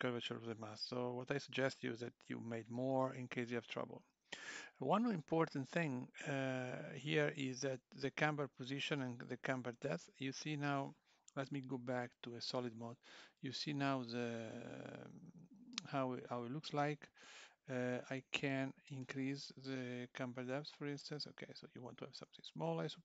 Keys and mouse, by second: 1.8-9.0 click, 19.0 click.